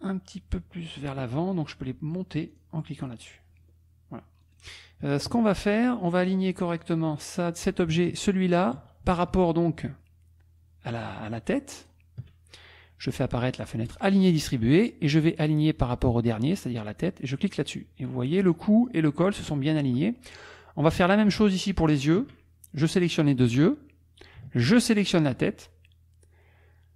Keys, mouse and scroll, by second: 2.5 click, 2.9 click, 4.4 click, 5.3 KP_Subtract, 5.8 click, 6.7 click, 7.9 shift+click, 11.9 shift+click, 13.9 click, 17.5 click, 18.4 click, 18.8 click, 19.2 click, 20.9 click, 21.9 shift+click, 24.7 shift+click.